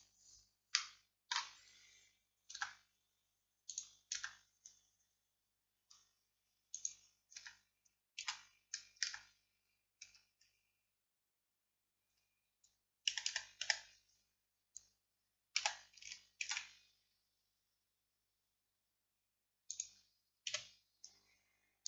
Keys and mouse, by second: 0.8-4.2 drag, 2.6 Tab, 4.2 Tab, 7.4 Tab, 8.3 z, 9.1 Tab, 10.1 Tab, 12.1 z, 13.3 a, 13.4 a, 13.7 a, 15.6 s, 20.5 KP_1.